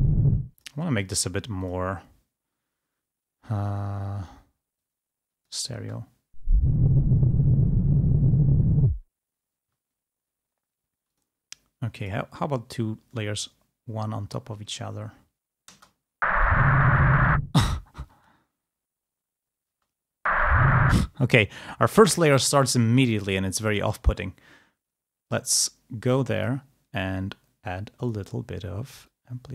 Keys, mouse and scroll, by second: 0.5 space, 0.7 click, 1.8 click, 4.9 click, 5.9 space, 9.7 space, 11.2 click, 12.2 middle click, 14.7 middle click, 15.8 space, 17.5 space, 18.2 space, 19.9 space, 21.0 space, 23.8 click, 26.5 click, 28.1 click, 29.1-29.5 drag.